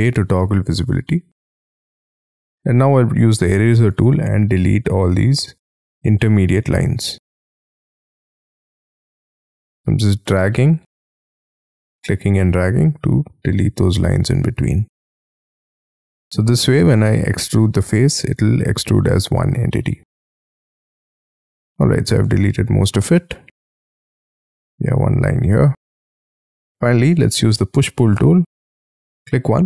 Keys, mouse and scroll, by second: 0.4 j, 1.9-3.2 scroll up 19, 3.2 e, 4.1-5.1 scroll down 16, 5.1-6.5 scroll up 15, 6.5 scroll down 7, 6.9-7.6 scroll up 4, 7.7-8.5 scroll down 11, 8.5-9.5 scroll up 12, 9.5 scroll down 6, 9.7-11.1 scroll up 5, 11.1-12.1 scroll down 18, 12.1-12.8 scroll up 7, 12.8-13.1 scroll down 6, 13.1 scroll up 7, 13.4 scroll down 1, 13.7-14.5 scroll up 5, 14.6-15.5 scroll down 20, 15.5-16.9 scroll up 13, 17.0-17.6 scroll down 10, 17.8-18.9 scroll up 6, 18.9-20.3 scroll down 15, 20.3-20.7 scroll up 5, 20.7-21.1 scroll down 7, 21.1 scroll up 1, 21.3 middle click, 22.3 space, 22.4-22.8 scroll up 6, 22.8 middle click, 23.8-24.2 scroll up 10, 24.2 e, 25.2-25.6 scroll down 8, 25.6 space, 26.1-27.1 scroll down 12, 27.1-28.0 scroll, 28.0-29.6 scroll up 3.